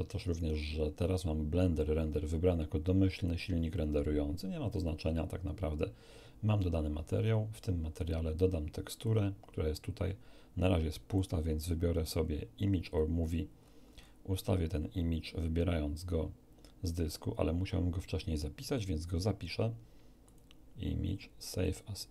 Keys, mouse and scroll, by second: 7.9 click, 9.0 click, 11.1 click, 12.8 click, 13.5-13.8 scroll down 2, 20.2 click, 21.6 click.